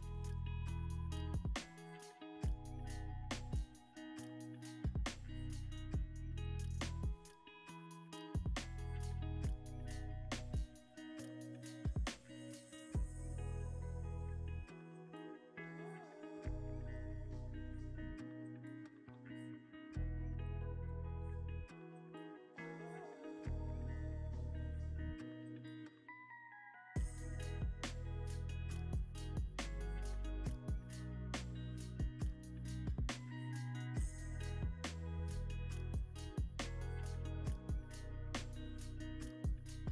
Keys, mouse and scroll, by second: 0.5 g, 0.7 z, 3.0 scroll, 3.0-3.5 scroll up 2, 3.4 middle click, 5.5 scroll down 1, 5.9 middle click, 7.6 shift+click, 12.5 alt+d, 14.1 g, 14.6 y, 15.9 ctrl+z, 17.2 ctrl+z, 19.0 alt+d, 23.4 middle click, 24.7 typing, 29.8 middle click, 33.3 scroll down 1, 38.1 scroll up 1, 38.7 middle click, 39.7 shift+a.